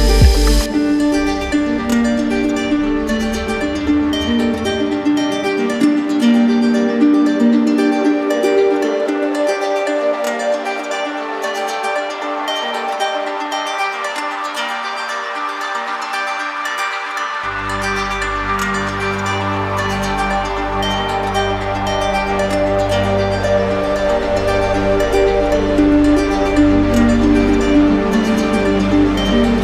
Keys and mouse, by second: 3.6-4.6 drag, 4.9-6.0 drag, 7.6-8.8 drag, 9.8-10.8 right drag, 11.0-12.4 drag, 12.4 right click, 14.8 right click, 16.5 click, 17.7 click, 19.4 click, 20.7 click, 23.1 alt+right click, 25.7 z, 27.0-28.1 drag, 28.7 z.